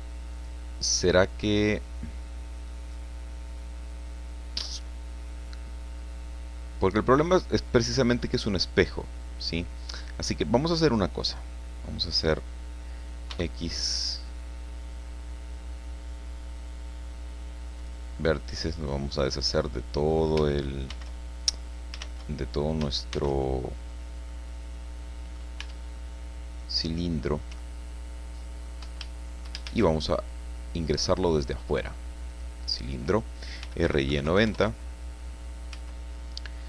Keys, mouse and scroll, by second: 0.3 click, 1.4-3.1 middle drag, 3.1-4.9 drag, 5.2-5.6 scroll down 1, 5.8-6.2 scroll up 1, 6.9-7.2 scroll down 1, 13.3 x, 17.8 click, 18.7-20.3 drag, 20.9 shift+x, 21.5-21.9 shift+scroll up 3, 22.0 shift+x, 23.1 shift+c, 23.8 scroll down 2, 24.3-25.5 drag, 25.6 Tab, 26.0-27.1 drag, 27.5 Caps_Lock, 27.5-28.8 drag, 29.1 shift+click, 29.5 shift+middle click, 29.7 shift+a, 32.3 click, 33.3-34.3 typing, 34.5 KP_Enter, 35.7 Caps_Lock.